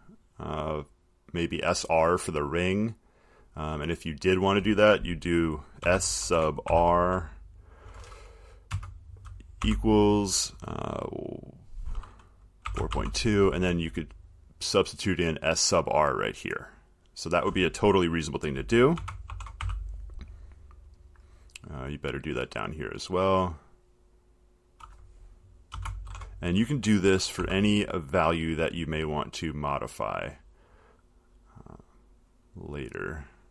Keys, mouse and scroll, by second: 4.4 click, 5.8-7.4 typing, 8.9 Right, 9.6-10.3 typing, 12.6-13.6 typing, 15.7-17.8 drag, 18.9-20.3 typing, 21.2-21.9 drag, 22.8 click, 25.0 click, 25.9 s, 26.2 shift+-, 27.6 r, 28.5 click, 30.6 click, 30.9 click, 32.7 click.